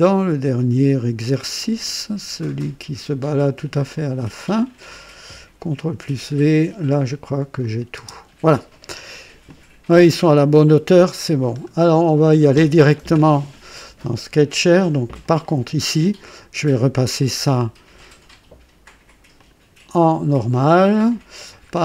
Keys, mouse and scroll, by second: 2.0-2.8 scroll down 4, 3.9 click, 5.6 ctrl+v, 7.6 click, 8.0 space, 9.0 click, 9.5-11.4 drag, 11.5 scroll down 1, 11.9-12.6 right drag, 15.2 click, 17.2 click, 18.0 click, 19.3 click, 20.5 click, 21.7-21.8 scroll down 1.